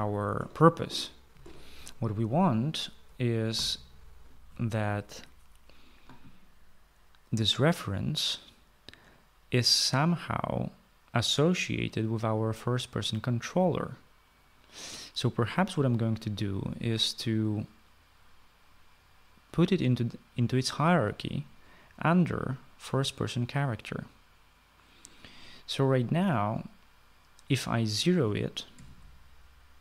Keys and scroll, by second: 0.0-2.9 typing, 4.1 Escape, 29.3 typing.